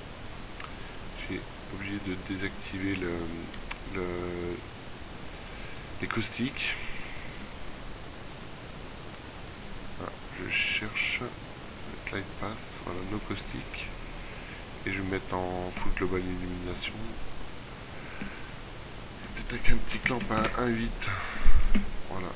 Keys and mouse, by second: 3.5 Escape, 21.4 ctrl+w.